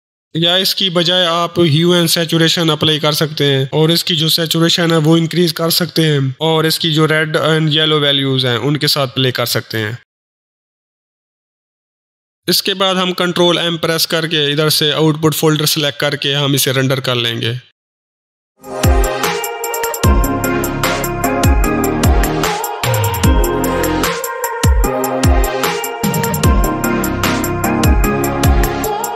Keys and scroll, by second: 1.3 Delete, 2.2 ctrl+space, 2.6 ctrl+h, 2.7 ctrl+u, 2.9 ctrl+e, 3.0 ctrl+Return, 12.4 ctrl+s, 13.5 ctrl+m, 15.4 ctrl+Return.